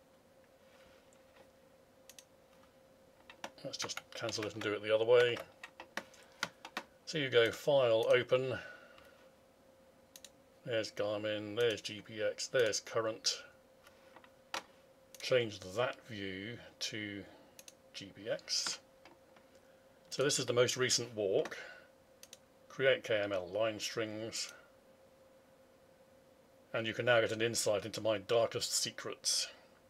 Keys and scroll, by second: 4.5 alt+Tab.